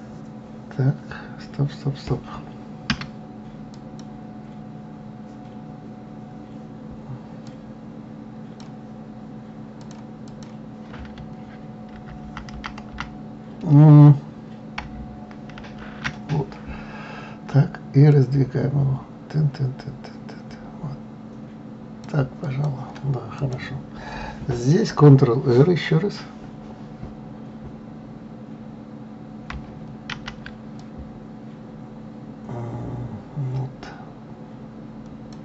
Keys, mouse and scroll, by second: 4.1 click, 7.9-10.3 drag, 10.7 click, 12.3 ctrl+z, 12.6 ctrl+z, 12.9 ctrl+z, 13.3 ctrl+z, 16.0 ctrl+shift+z, 18.5-21.5 drag, 22.9 click, 23.8 click, 30.5 ctrl+r.